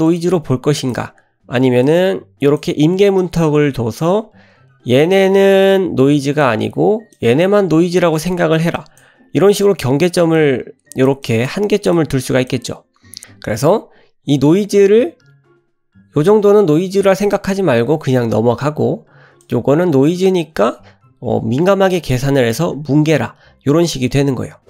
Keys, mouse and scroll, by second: 0.0 click, 0.8 click, 1.8 click, 3.2 click, 5.1-6.4 drag, 7.1 click, 7.9 click, 8.7 click, 9.6 click, 10.3 click, 11.2 click, 11.9 click, 16.3 click, 19.4 click.